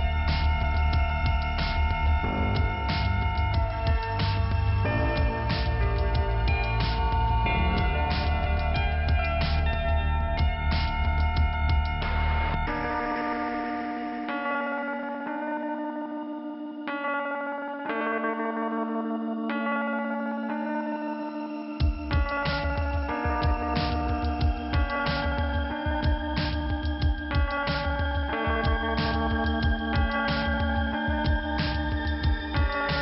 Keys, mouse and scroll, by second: 0.1 click, 4.0 click, 4.6-5.1 scroll up 1, 5.4 click, 5.9 click, 6.4 click, 7.7 click, 7.8 click, 8.2 click, 9.6 click, 10.1 click, 12.8 click, 13.4 click, 15.7 click, 15.8 click, 20.8 click, 21.0 click, 21.1 click, 21.2 double click, 21.3 double click, 21.7 double click, 21.8 double click, 22.1 double click, 22.6 double click, 22.6 double click, 24.5 click, 25.8 click, 27.1 click, 28.3 click, 30.1 click.